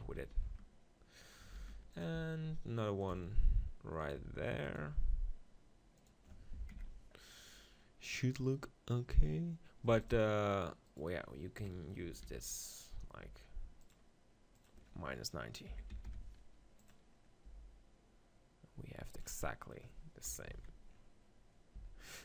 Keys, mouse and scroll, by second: 0.0 z, 1.6 shift+d, 2.2 r, 3.1-4.2 drag, 3.1 g, 4.1 r, 4.9 g, 9.9 x, 10.5-12.7 right drag, 11.6 KP_1, 12.2 shift+d, 12.7 click, 12.8 right click, 13.3 r, 16.3 click, 17.1-18.5 middle drag, 17.5 g, 19.1-20.5 drag, 20.4 KP_7, 20.5 z, 21.8 z.